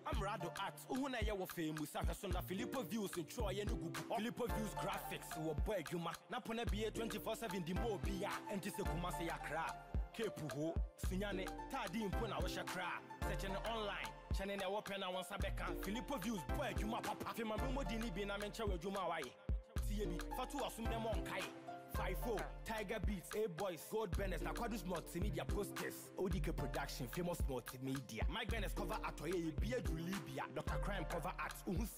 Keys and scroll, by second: 13.0 ctrl+=.